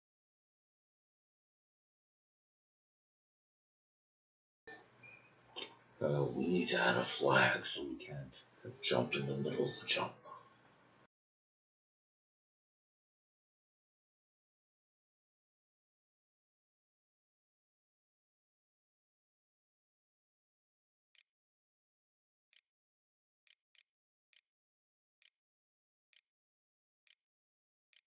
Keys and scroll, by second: 19.9-20.7 typing, 22.3-28.0 typing.